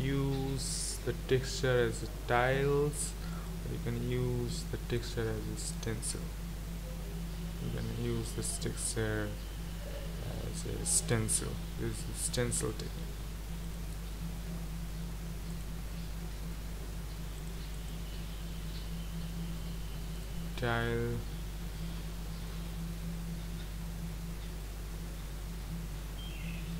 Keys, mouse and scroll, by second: 22.5-26.7 middle drag.